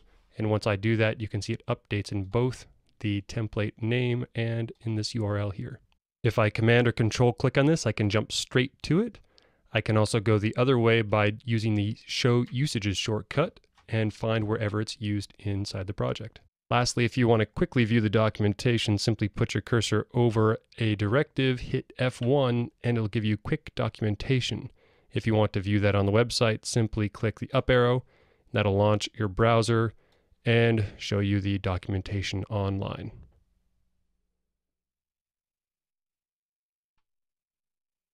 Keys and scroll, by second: 22.4 F1.